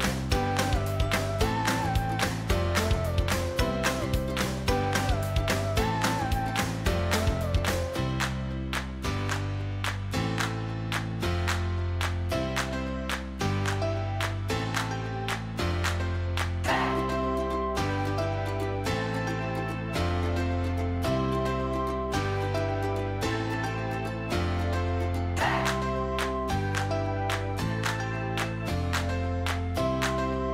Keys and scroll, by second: 7.2 ctrl+t.